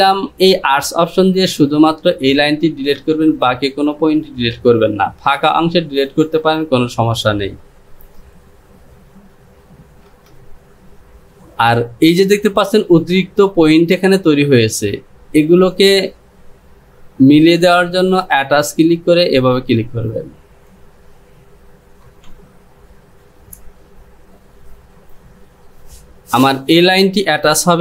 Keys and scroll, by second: 22.3 Home.